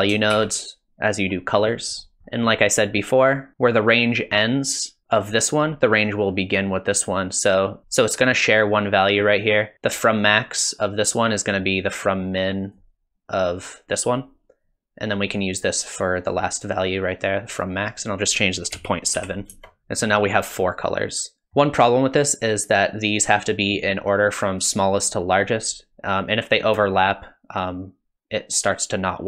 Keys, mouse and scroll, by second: 0.3 shift+d, 2.0 middle click, 2.2 scroll up 2, 2.3 middle click, 11.5 click, 18.0 click, 19.8 middle click, 20.0 middle click, 21.4 middle click, 26.8 shift+click.